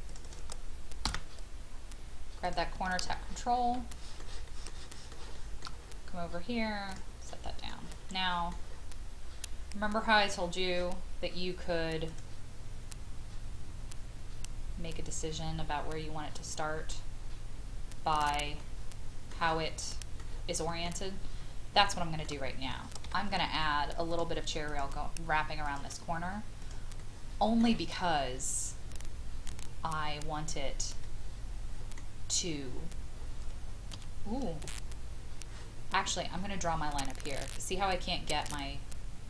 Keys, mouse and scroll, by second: 0.0 click, 1.1 m, 2.5 click, 3.1 scroll down 1, 3.9 shift+middle click, 4.5 shift+middle click, 4.9 shift+middle click, 5.3 shift+middle click, 6.9 click, 7.3 middle click, 8.7 scroll up 1, 9.2 scroll down 1, 12.1 click, 18.6-20.7 middle drag, 20.9-21.5 scroll down 1, 21.9 shift+middle click, 23.0 shift+i, 24.1 click, 27.0-32.3 middle drag, 32.5-33.9 scroll up 1, 33.9 Escape, 35.4-36.3 scroll down 1.